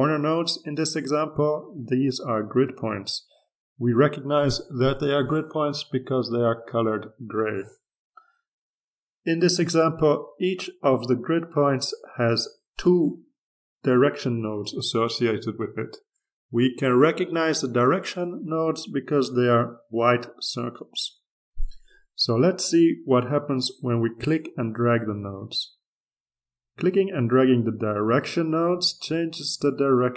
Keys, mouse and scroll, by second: 13.8-16.1 drag, 16.9-21.7 drag, 24.4-30.1 drag.